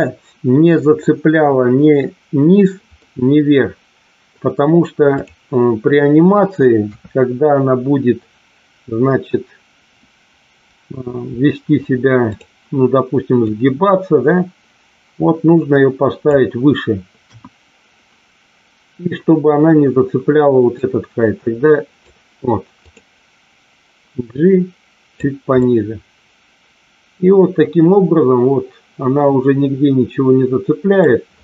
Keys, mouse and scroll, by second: 0.9-1.9 middle drag, 2.9-4.2 middle drag, 5.2 click, 6.8 KP_3, 12.3 click, 13.6-16.2 drag, 17.2 KP_1, 20.8-22.1 drag, 22.8 click, 24.2-25.2 drag, 25.6-30.9 middle drag.